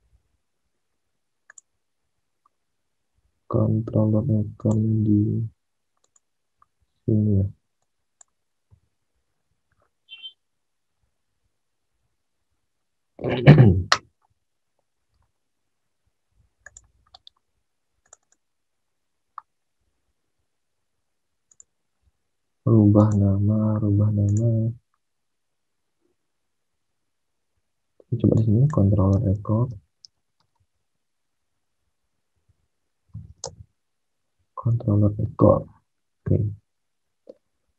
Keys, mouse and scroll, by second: 8.8 alt+Tab, 14.1 alt+Tab, 28.8-33.7 typing, 35.0 alt+Tab, 35.0-35.9 typing.